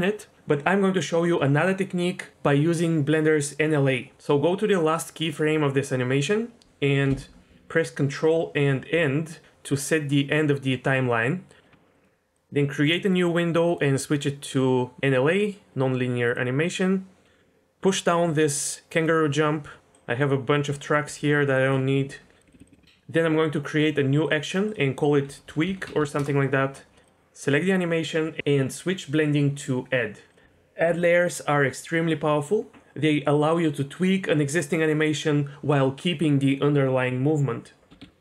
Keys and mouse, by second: 8.9 ctrl+End, 11.9-12.9 drag, 13.7-16.4 drag, 19.9 drag, 21.0 b, 22.0 Delete, 22.3 click, 22.5 Delete, 22.5 click, 22.6 Delete, 22.7 Delete, 24.2 click, 24.7-26.2 drag, 27.0 click, 29.2-30.3 drag, 38.0 KP_1.